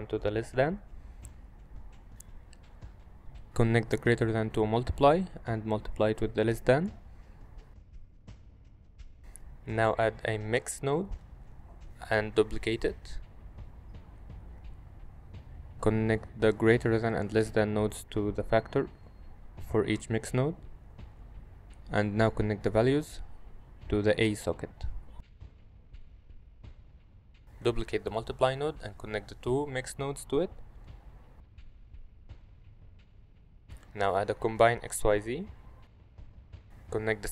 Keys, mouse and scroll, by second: 0.8 middle click, 2.2 click, 3.0-4.4 drag, 5.8-6.3 drag, 8.1 middle click, 8.8 shift+a, 11.8 shift+d, 12.0 y, 15.0-15.6 drag, 16.2-17.0 drag, 20.9 click, 22.5-23.4 drag, 24.8-25.2 middle drag, 28.0 click, 28.5 shift+d, 29.4-29.8 drag, 30.2-30.7 drag, 31.8 middle click, 33.1 shift+a, 37.0-37.3 drag.